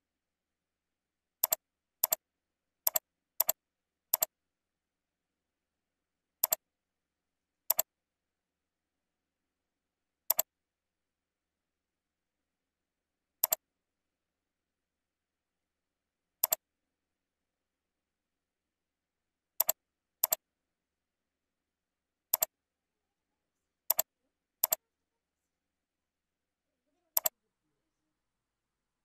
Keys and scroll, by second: 17.4 ctrl+b.